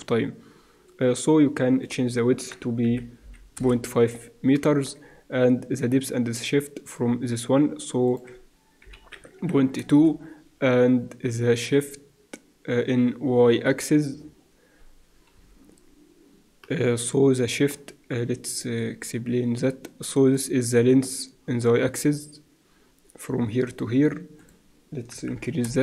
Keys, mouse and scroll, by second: 1.8-4.2 drag, 4.5 middle click, 8.0-10.9 drag, 14.8 middle click, 18.7 click, 20.6 middle click, 21.0-22.7 drag, 24.3-25.8 drag.